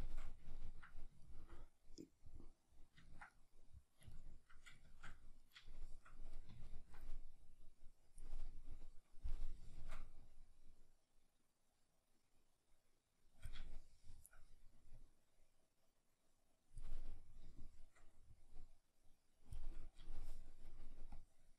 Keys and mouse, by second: 7.5 click, 8.5-10.3 middle drag, 10.3-13.7 drag, 13.7-15.0 shift+middle drag, 15.0-16.9 drag, 16.9-18.4 middle drag, 18.4-19.7 drag, 19.7-21.1 middle drag, 21.1-21.5 drag.